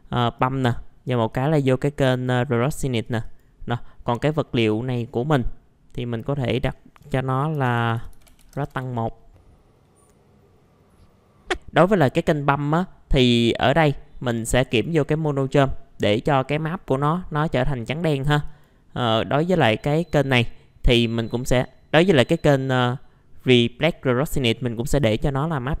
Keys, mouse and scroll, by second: 1.3-3.0 drag, 3.0-7.0 drag, 7.5-8.7 typing, 9.6 click, 9.8 middle click, 10.1 click, 11.8-25.8 drag.